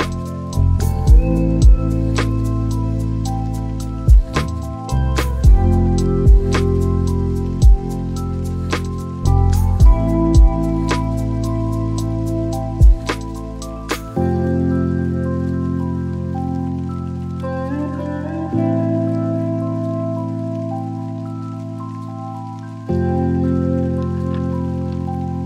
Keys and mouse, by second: 0.6 click, 3.0-7.2 drag, 12.4-13.8 drag, 15.7 click, 16.0 click, 16.7 click, 18.5-23.8 drag, 24.2-25.4 drag.